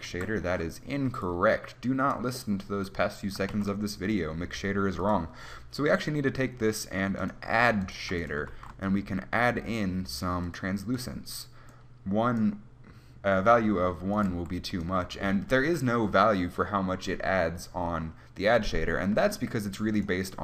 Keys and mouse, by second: 0.2 Delete, 1.7 click, 3.6 shift+a, 8.1-10.6 drag, 8.1 g, 8.7 shift+a, 11.9-14.4 drag, 14.4 right click, 14.4 g, 14.7 click.